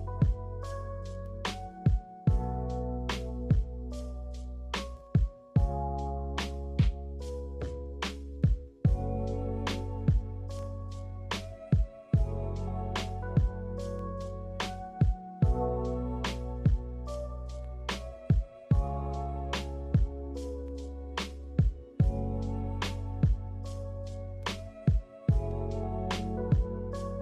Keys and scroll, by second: 16.3 g, 18.0 z, 20.5 z, 22.7-23.7 typing.